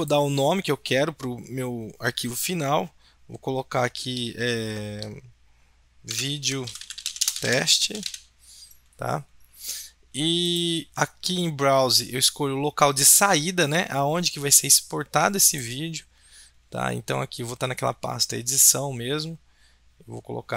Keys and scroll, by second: 5.9-8.6 typing.